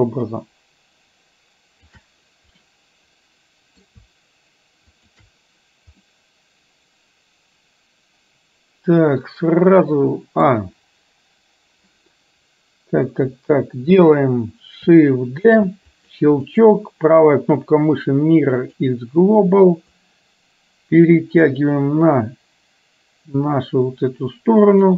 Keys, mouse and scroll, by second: 0.1-2.1 shift+drag, 2.7-3.9 middle drag, 5.0 shift+click, 6.1-10.5 middle drag, 13.4 KP_1, 15.6 shift+d, 16.6-18.9 right drag, 20.1-24.9 drag.